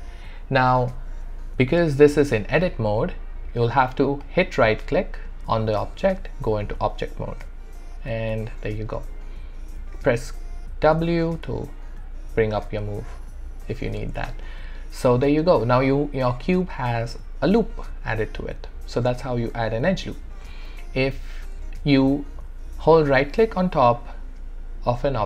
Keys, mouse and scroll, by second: 4.2-7.9 right drag, 7.9 click, 8.6-10.9 alt+drag, 10.9 w, 11.6-13.8 alt+drag, 13.8 ctrl+z, 14.4-22.9 alt+drag, 22.9-25.2 right drag.